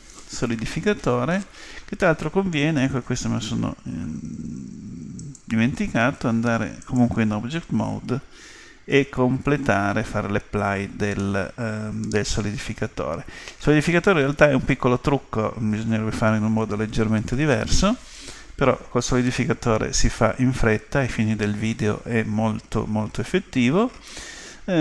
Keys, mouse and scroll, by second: 5.6-7.2 drag, 11.2-13.0 middle drag.